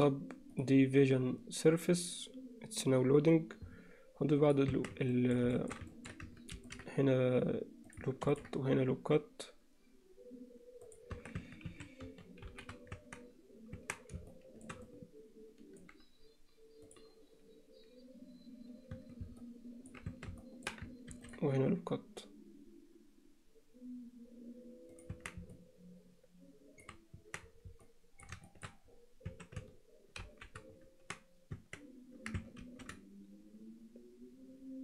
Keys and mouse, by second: 4.5 click, 4.8 Tab, 5.2 middle click, 5.6 shift+middle click, 5.9 ctrl+alt+middle click, 6.6 ctrl+r, 8.2 ctrl+r, 11.2 Tab, 11.4 Tab, 11.7 a, 12.5 shift+n, 13.0 Tab, 13.8 Tab, 14.3 alt+shift+middle click, 14.9 alt+middle click, 19.0 Tab, 19.4 middle click, 20.4 Tab, 20.4 middle click, 21.1 ctrl+r, 25.2 Tab, 25.6-26.8 middle drag, 27.2 Tab, 27.8 middle click, 28.5 alt+shift+middle click, 29.3 a, 30.3 shift+n, 30.9 Tab, 32.3 Tab, 32.6 ctrl+r.